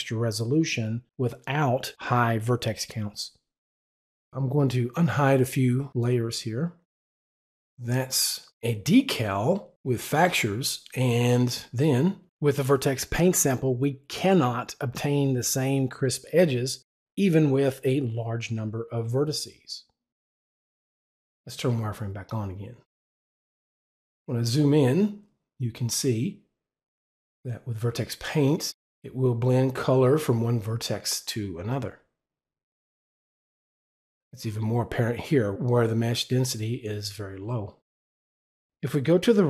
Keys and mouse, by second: 6.1 click, 12.8 click, 21.7 w.